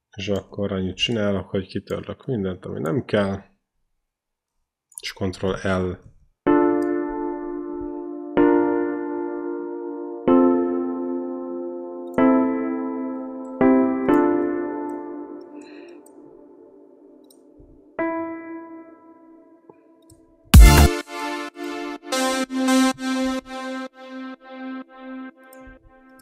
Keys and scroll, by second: 4.2 Delete, 5.8 ctrl+l, 6.3 space, 14.6 space, 17.8 e, 20.3 space, 21.9 q, 23.5 ctrl+c, 25.9 ctrl+c.